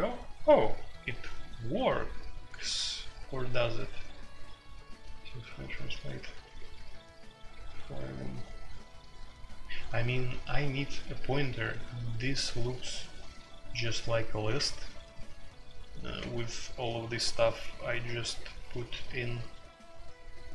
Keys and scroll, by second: 16.0-17.6 typing, 19.6 typing.